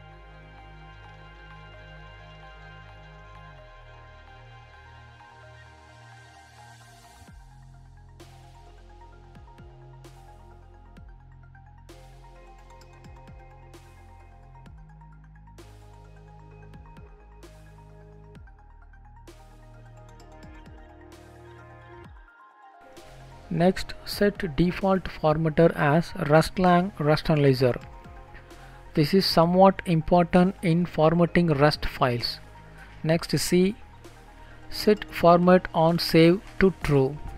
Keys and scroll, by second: 7.5 Delete, 8.0 ctrl+space, 8.5 Down, 10.4 Return, 11.4 ctrl+s, 23.0 Down, 23.2 Return, 30.0 Return.